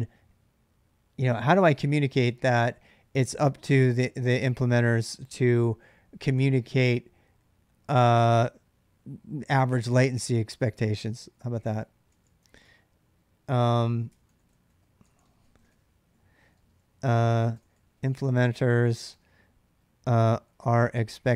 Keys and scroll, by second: 10.8-21.3 typing, 13.9 ctrl+[, 14.0 ctrl+j.